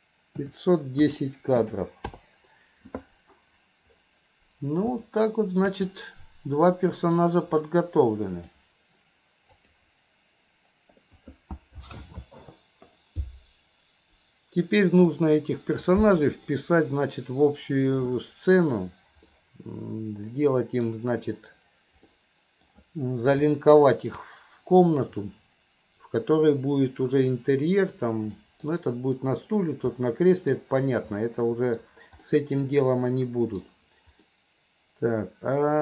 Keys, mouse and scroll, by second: 5.1-5.6 middle drag, 6.0-7.2 middle drag, 8.5-10.7 drag, 16.6-18.0 middle drag, 19.3-20.9 middle drag, 22.1-22.7 middle drag, 23.5-24.1 middle drag, 28.4 middle drag, 30.0 middle click, 31.2-31.8 middle drag, 32.4-33.6 middle drag, 34.5-35.8 middle drag.